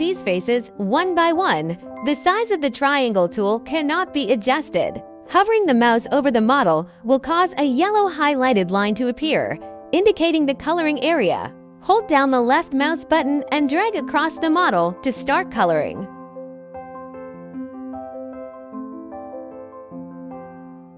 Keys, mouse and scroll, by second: 1.3 click, 3.8 click, 5.1 ctrl+z, 5.1 scroll, 14.2-16.6 scroll, 20.5 scroll.